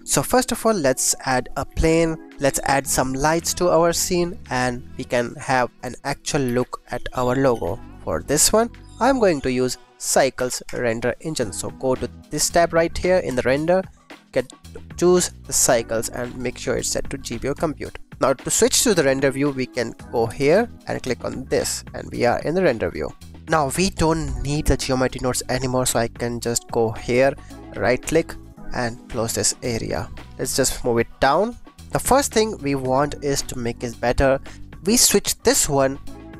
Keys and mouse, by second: 0.1 shift+a, 1.6 s, 2.7 click, 3.0 drag, 3.3 shift+a, 6.4-8.2 typing, 6.9 click, 7.8 click, 8.5 click, 9.1-10.7 drag, 13.2 click, 14.3-15.6 drag, 16.3-17.5 drag, 23.4 ctrl+s, 27.7-29.3 drag, 31.7 ctrl+s, 32.3 click, 35.7-36.3 drag.